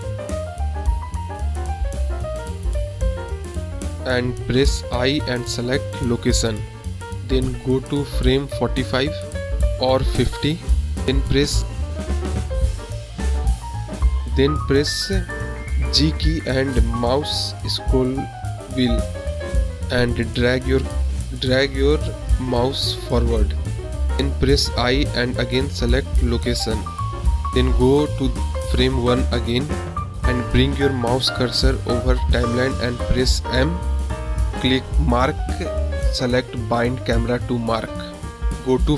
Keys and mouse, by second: 1.1 g, 3.2 ctrl+z, 5.5 i, 11.3 click, 17.2 drag, 19.6 g, 30.1 click, 32.4 m, 33.1-33.6 drag, 34.0 click, 35.7 click.